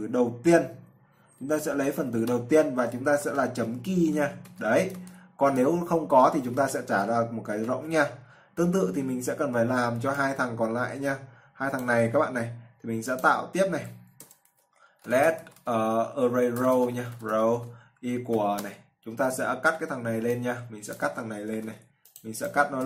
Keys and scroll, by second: 8.9-9.6 typing, 21.8 ctrl+x.